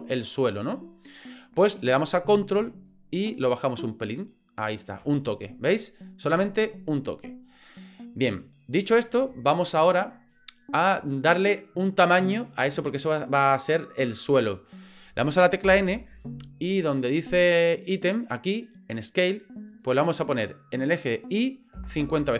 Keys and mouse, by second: 3.5-4.7 ctrl+drag, 10.3-11.6 middle drag, 15.6 n, 17.4 click, 19.7-22.3 drag.